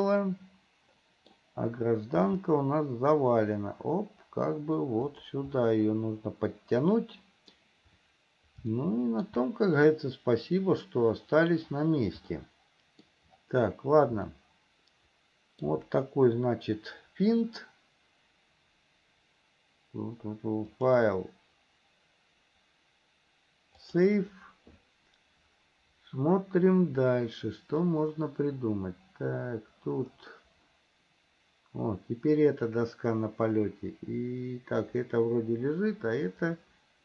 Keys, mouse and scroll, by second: 2.5 r, 5.9-8.0 middle drag, 8.9 shift+middle click, 12.6 middle click, 14.6-16.0 shift+middle drag, 20.9-25.6 drag, 28.1-29.5 middle drag, 29.6 middle click, 30.0 middle click, 30.6-37.0 middle drag.